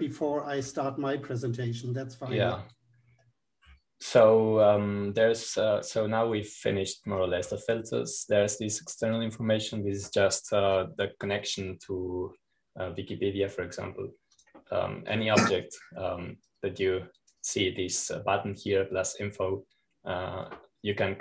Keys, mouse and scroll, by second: 0.1-1.9 drag, 13.4 click, 16.3 click, 18.4-20.0 drag.